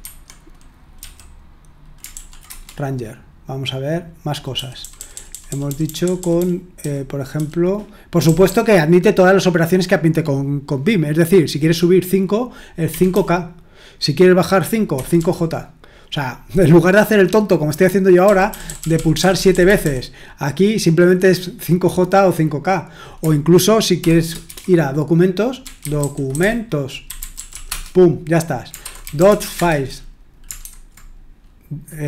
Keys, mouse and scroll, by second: 0.0 Escape, 1.0 q, 2.1 ctrl+p, 2.5 Return, 4.5-6.4 typing, 8.2 typing, 12.6-13.6 typing, 14.7-15.6 typing, 18.0-20.1 typing, 23.8-32.0 typing.